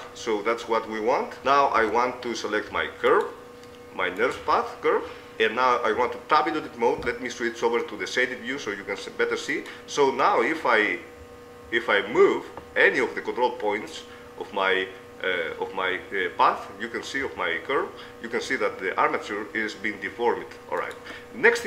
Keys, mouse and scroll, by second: 1.9 ctrl+Tab, 1.9-3.1 middle drag, 3.1 click, 3.3-6.3 right drag, 6.1 Tab, 6.9 z, 8.5-11.1 right drag, 14.7 middle click, 21.5-21.6 middle drag.